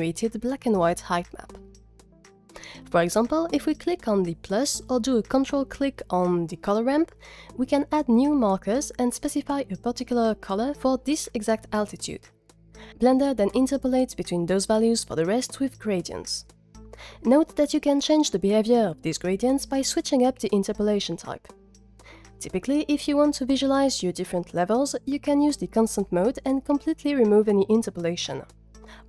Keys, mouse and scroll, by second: 4.6 ctrl+click, 7.0 click, 21.6 click, 25.0 middle click.